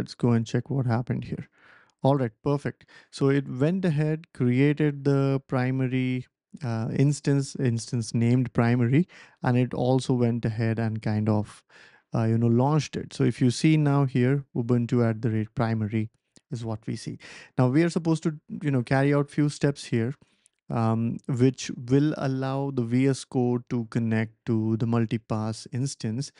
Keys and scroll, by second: 0.0-0.4 typing, 17.8 ctrl+l.